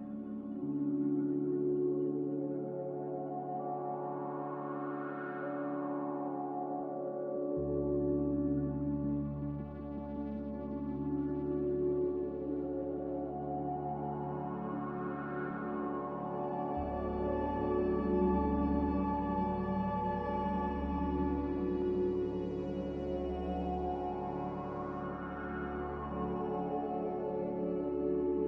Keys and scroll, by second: 7.5 a, 24.2 z.